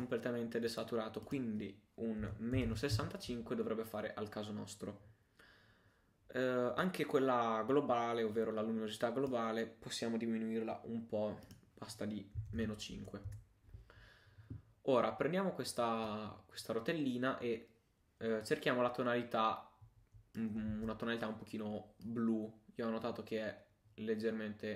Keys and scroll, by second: 20.7 super+z.